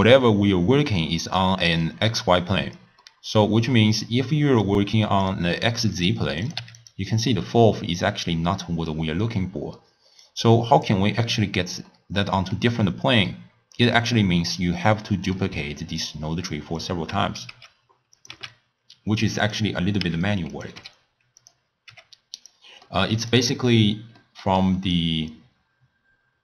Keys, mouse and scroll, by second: 1.8-4.7 middle drag, 4.7 click, 6.2 click, 6.4 click, 7.3-10.3 middle drag, 10.3 click, 11.9-16.2 middle drag, 16.2 click, 17.8 x, 18.2 click, 18.6 x, 19.4 click, 20.4 x, 20.5 click, 20.8 e, 21.9 g, 22.9-23.4 middle drag, 23.4 drag, 23.6-24.2 scroll up 4, 24.2 middle click, 25.0 click.